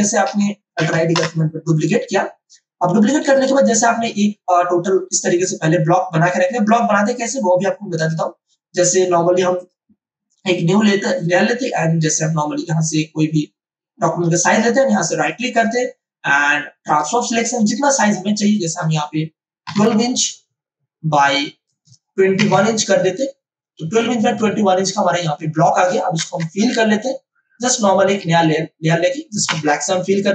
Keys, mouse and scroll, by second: 0.7 alt+i, 0.9 alt+d, 1.1 Return, 3.2 click, 7.9 click, 11.5 m, 12.6-15.1 drag, 15.1 right click, 16.8 click, 21.6 click, 23.9-26.2 drag, 26.2 Return, 27.5 click, 28.2 ctrl+z, 29.4 alt+BackSpace.